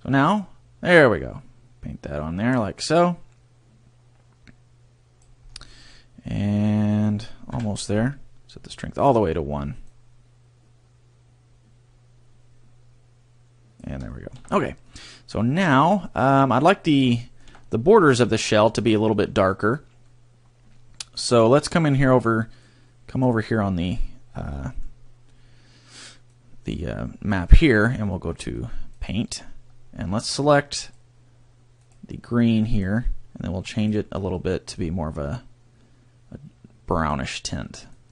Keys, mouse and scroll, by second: 0.3 click, 5.5-5.8 scroll down 2, 5.8 middle click, 7.5 KP_3, 8.7 click, 9.9 click, 14.1 shift+middle click, 14.9 middle click, 17.2 shift+middle click, 20.1 middle click, 22.5 click, 23.6 scroll, 24.5 middle click, 26.3 click, 29.9-30.8 scroll, 30.8 click.